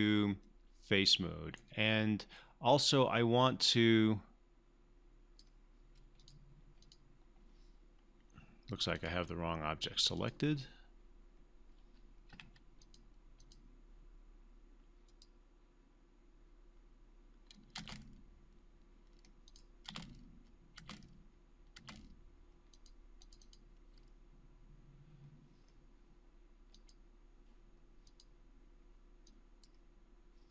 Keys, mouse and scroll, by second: 3.6-4.5 drag, 12.3 q, 12.8 click, 17.8 space, 19.4 click, 19.8 space, 22.7 click, 26.7-29.9 drag.